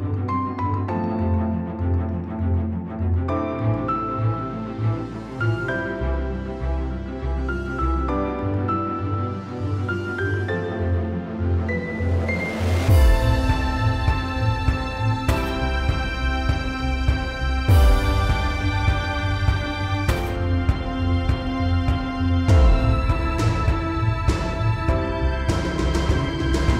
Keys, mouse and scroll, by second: 1.3 p, 2.7-3.6 drag, 8.9 ctrl+z, 9.5-10.2 drag, 16.5 click, 17.7 shift+click, 18.1 right click, 19.3 click, 19.5 click, 24.1 click, 26.3 click.